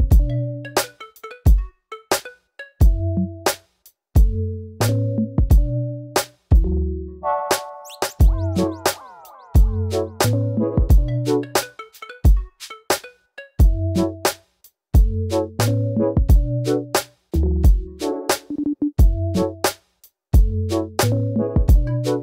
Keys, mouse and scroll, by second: 0.2 click, 0.3 g, 0.6 click, 0.8 g, 1.2 scroll down 1, 1.3 middle click, 1.9 scroll up 3, 2.2 click, 2.3 middle click, 2.7 click, 3.3 click, 3.5 click, 4.0 middle click, 4.7 click, 5.5 scroll down 2, 5.6 middle click, 6.4 scroll down 1, 6.5 middle drag, 6.8 Tab, 7.0-7.4 middle drag, 7.4 drag, 7.5-9.1 middle drag, 10.1 KP_1, 10.7-11.1 scroll up 6, 11.2 shift+middle click, 11.5 Tab, 11.7 click, 12.2 g, 13.7 click, 13.8-17.5 typing, 14.8 click, 15.5 click, 16.0 click, 16.6 click, 17.4 click, 17.8 click, 18.6 click, 18.7 g, 19.3 scroll down 2, 19.3 middle click, 20.0 click, 20.2 middle click, 20.9 click, 21.0 middle click, 21.5 shift+click, 21.7 shift+middle click, 22.0 s.